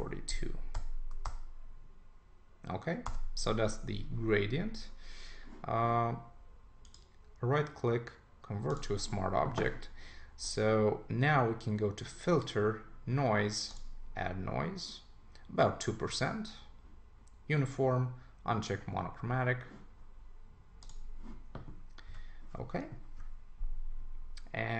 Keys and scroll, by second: 0.7 Return, 22.1 super+s.